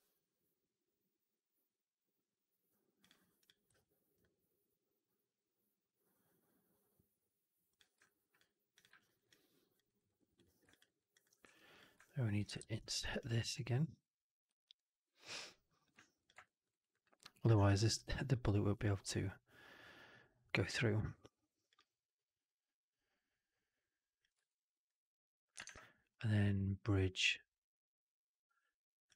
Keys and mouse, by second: 3.3 click, 3.6 q, 7.9-8.2 alt+drag, 8.6 click, 8.8 alt+right drag, 9.0 alt+right drag, 9.2-9.7 alt+drag, 9.7 alt+right drag, 9.9 alt+right drag, 10.2 right click, 10.6 alt+click, 10.7 alt+right drag, 11.0 alt+click, 11.3 3, 11.9 alt+click, 12.5 shift+x, 12.9 alt+right click, 13.1-15.7 alt+drag, 16.1 shift+click, 16.3 alt+click, 16.6 alt+right click, 16.8 alt+click, 17.4 shift+Tab, 24.3 alt+click, 25.5 shift+Tab.